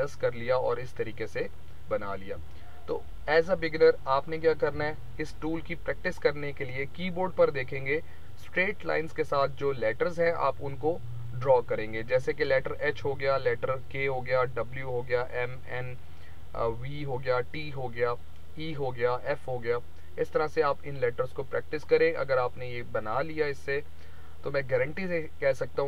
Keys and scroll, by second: 4.6 Delete.